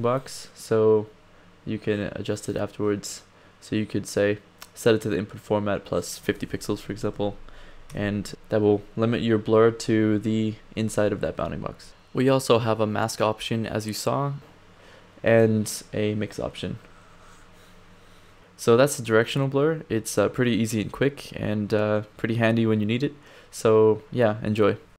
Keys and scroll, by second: 6.8 5, 7.9 Return, 9.5 Down, 10.8 Up.